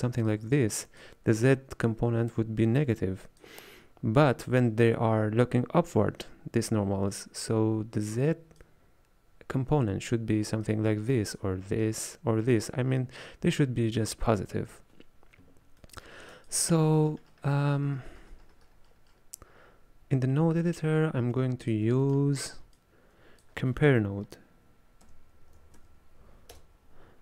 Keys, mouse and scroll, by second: 0.3-15.9 drag, 15.9 middle click, 16.5-22.2 ctrl+drag, 22.2-22.8 middle drag, 22.8 click.